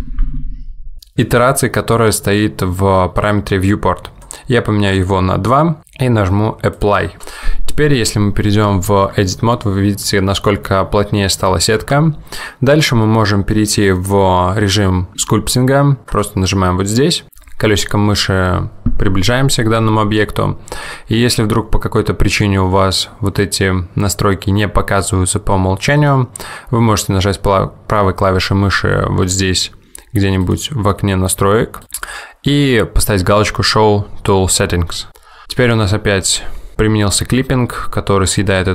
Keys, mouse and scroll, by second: 4.3 click, 6.9 click, 9.2 Tab, 11.9 Tab.